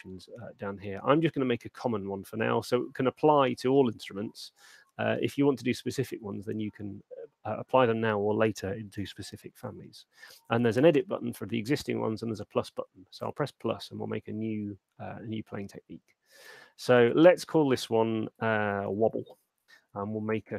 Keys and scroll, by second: 18.7-19.5 typing.